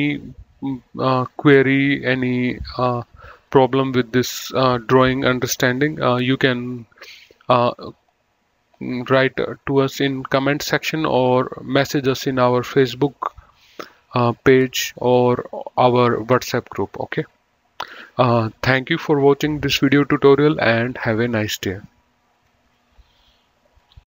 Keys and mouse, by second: 23.9 F10.